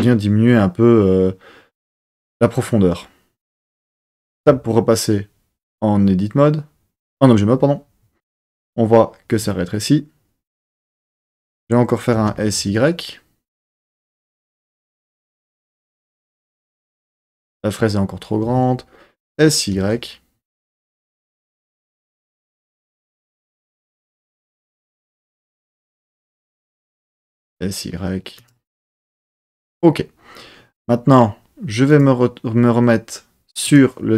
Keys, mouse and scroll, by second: 3.6 click, 4.6 Tab, 11.0 Tab, 12.1 s, 12.8 y, 14.4 click, 15.1 Tab, 18.6 Tab, 19.3 s, 19.9 y, 22.3 click, 23.0 Tab, 26.7 Tab, 27.4 s, 28.6 click, 28.8 Tab, 31.8 click, 33.6 click.